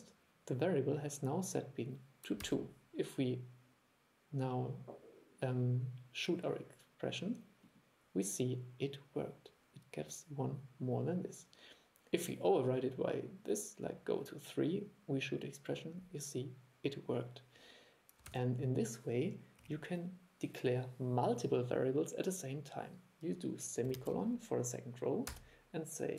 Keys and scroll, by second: 2.5 super+e, 18.4 super+e.